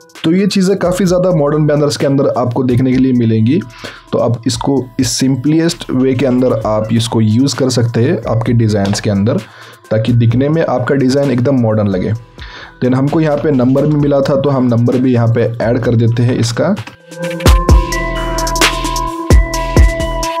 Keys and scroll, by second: 1.1 ctrl+alt+t, 9.0 Return, 12.6 alt+Tab, 18.6-20.4 typing, 20.0 ctrl+x.